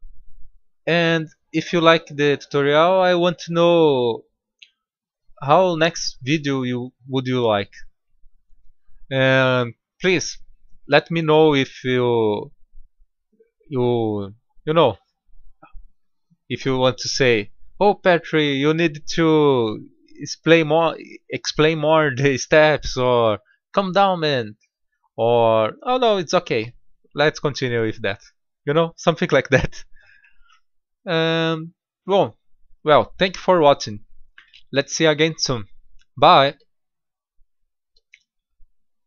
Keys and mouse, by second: 0.3-1.1 middle drag, 2.1-4.4 middle drag, 5.0-7.3 middle drag, 12.6-17.2 middle drag, 18.8 middle click, 24.5-30.8 middle drag, 31.1-33.0 middle drag, 34.3-35.5 middle drag.